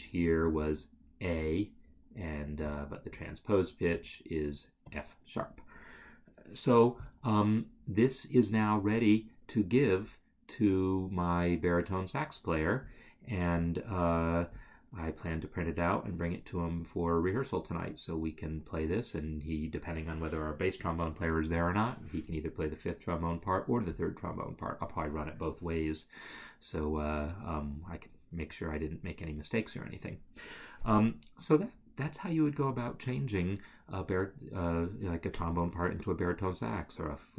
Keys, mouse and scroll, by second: 2.7 click, 10.1-10.7 scroll, 12.9 scroll, 23.3 scroll.